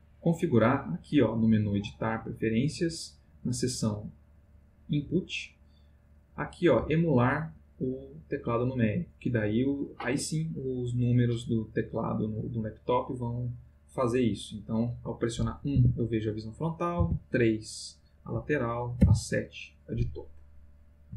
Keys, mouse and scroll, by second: 2.5 click, 5.0 click, 14.2 click, 15.7 1, 17.0 3, 19.0 7, 20.0-21.1 middle drag.